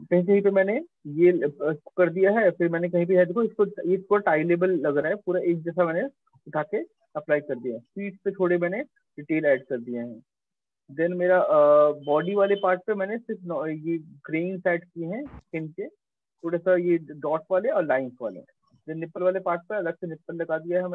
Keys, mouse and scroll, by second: 0.1 middle click, 0.3 middle click, 0.6 middle click, 1.2 middle click, 1.3 middle click, 2.3 middle click, 2.7 middle click, 4.7 middle click, 6.4 middle click, 7.0 middle click, 8.6 middle click, 8.7 middle click, 9.5 middle click, 10.0 middle click, 10.5 middle click, 10.7 middle click, 11.3 middle click, 11.4 middle click, 11.5 middle click, 12.6 middle click, 13.4 middle click, 13.7 middle click, 13.9 middle click, 15.4 middle click, 17.9 middle click, 19.3 middle click, 19.5-20.2 scroll, 20.3 middle click, 20.8 middle click.